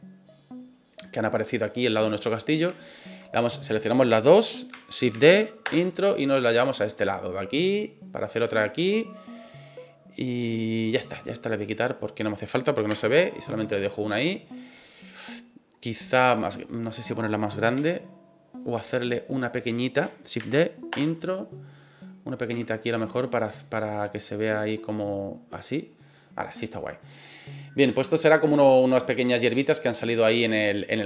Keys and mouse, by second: 0.7-1.9 drag, 2.1 middle drag, 2.8 shift+right click, 5.1 shift+d, 5.6 Return, 6.2-8.5 drag, 9.0-10.8 middle drag, 11.5 right click, 12.0 right click, 12.9 Delete, 13.3-14.3 middle drag, 16.3 s, 16.9 right click, 17.7 s, 18.5 click, 19.4 right click, 20.4 shift+d, 20.9 Return, 21.5 click, 22.5 s, 23.2 click, 23.6 click, 24.7 click, 25.8 right click.